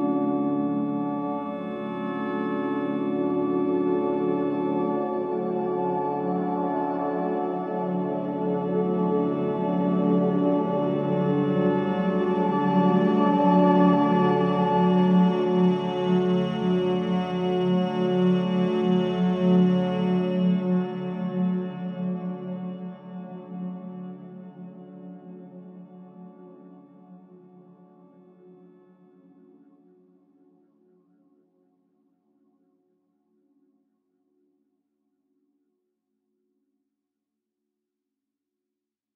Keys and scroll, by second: 0.7 4, 2.9 3, 3.6 ctrl+d, 3.7 Escape, 8.7 Escape, 8.9 ctrl+z, 12.8 4, 17.0 9, 17.1 Return, 20.2 2, 21.4 F1, 22.7 Delete, 24.1 4, 24.8 3, 25.3 ctrl+d, 25.5 Escape, 26.6 4, 29.3 3, 31.4 ctrl+d, 31.7 Escape.